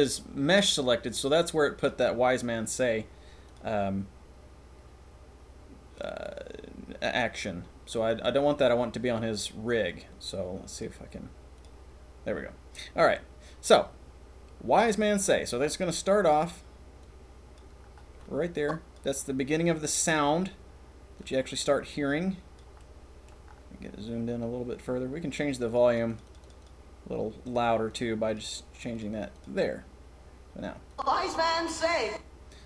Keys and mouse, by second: 1.8 click, 3.5 click, 10.7 click, 17.0 click, 18.2-18.9 drag, 21.1 click, 22.8 click, 25.8 click, 26.2 click, 26.6 click, 27.8 click, 28.3 click, 28.7 click, 28.9 click, 29.3 click, 30.8 click, 31.9 click.